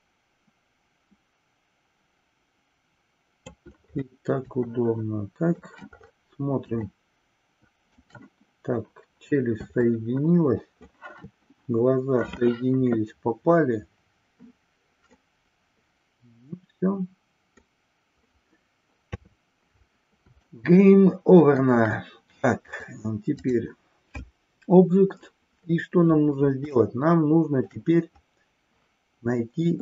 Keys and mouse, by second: 4.7-5.7 shift+middle drag, 6.9-8.1 shift+middle drag, 9.9-11.1 shift+middle drag, 15.2-17.7 middle drag, 19.0 KP_3, 20.3-21.9 shift+middle drag, 22.6-23.5 drag, 26.9-27.7 shift+middle drag.